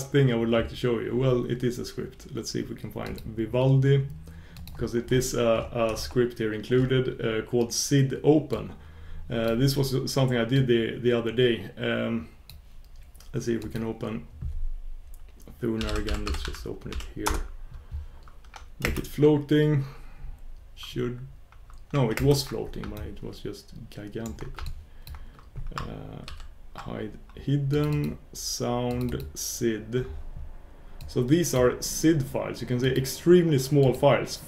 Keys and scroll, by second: 8.6 shift+super+q, 18.9 super+space, 22.1 super+space, 23.4 super+space.